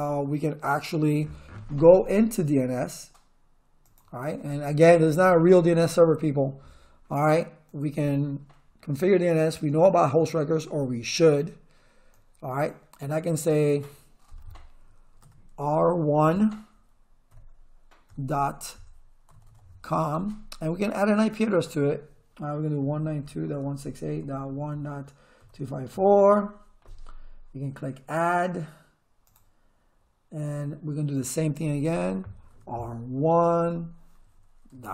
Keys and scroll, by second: 15.2 r, 17.3-20.0 typing, 22.6-26.4 typing, 32.5 r, 33.6-34.9 typing.